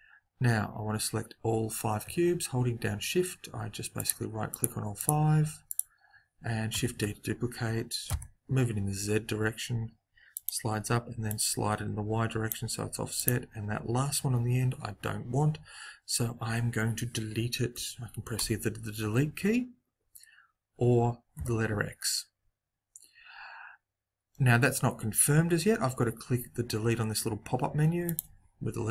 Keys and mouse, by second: 3.9-7.5 right drag, 6.7 shift+d, 11.2 click, 13.1-15.0 middle drag, 17.7 Delete, 24.6 x.